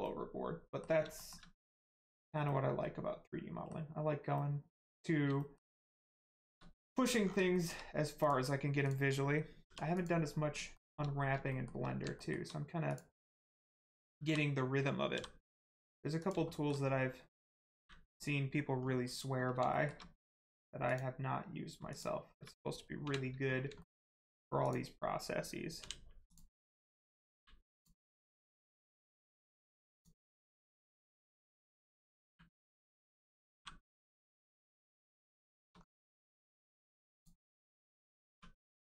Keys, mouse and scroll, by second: 0.0 middle click, 1.1 shift+middle click, 1.7 middle click, 1.7 middle click, 4.3 middle click, 5.7 middle click, 5.8 middle click, 6.7 scroll down 1, 7.5 shift+middle click, 8.1 click, 8.8 click, 9.6 g, 9.9 click, 10.2 scroll up 1, 10.7 shift+middle click, 11.5 shift+middle click, 12.9 middle click, 14.2 l, 16.1 click, 16.5 shift+middle click, 17.7 u, 18.7 scroll down 1, 19.7 shift+middle click, 20.3 middle click, 20.8 click, 21.9 shift+click, 23.0 u, 23.7 shift+middle click, 24.6 click, 25.7 u, 26.2 click, 27.3 u, 27.7 click, 29.4 u, 29.9 click, 31.9 l, 32.2 u, 33.5 g, 34.3 click, 34.5 shift+middle click, 34.9-35.3 scroll up 1, 35.5 shift+middle click, 35.7-36.1 scroll up 1, 36.2 shift+middle click, 37.1 click, 37.3-38.2 scroll up 1, 38.3 1, 38.5 click.